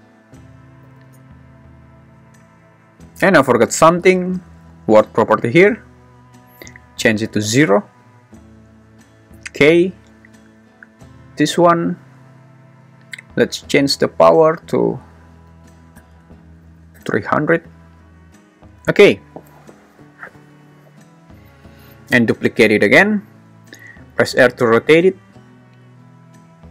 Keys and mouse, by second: 0.3 click, 0.9 0, 6.8 click, 10.9 click, 12.1 `, 15.1 click, 16.1 BackSpace, 16.7 0, 22.6 shift+d, 23.0 Escape, 23.7 r.